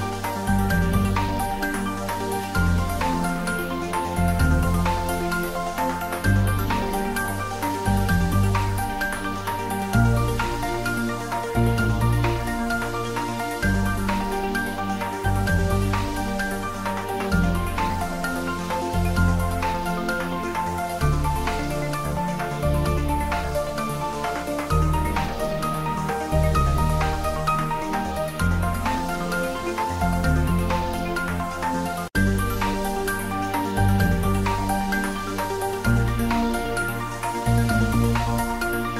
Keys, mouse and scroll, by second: 0.6 click, 1.6 s, 2.2 click, 3.5 shift+click, 4.3 s, 6.4 click, 6.5 Tab, 6.7 shift+middle click, 7.3 Tab, 8.8 3, 9.0 click, 15.3 click, 15.5 shift+middle click, 15.9 ctrl+middle click, 16.9 ctrl+middle click, 17.4 ctrl+z, 18.1 i, 22.5 click, 22.8 middle click, 24.6 middle click, 25.2 ctrl+middle click, 25.6 shift+middle click, 25.7-27.4 ctrl+middle drag, 27.4 ctrl+z, 28.1 i, 30.1 3, 30.5 click, 31.0 shift+click, 32.2 ctrl+middle click, 33.1 click, 33.7-35.0 ctrl+middle drag, 35.2-36.7 drag, 36.7 Tab, 38.1 1, 38.4-38.9 drag.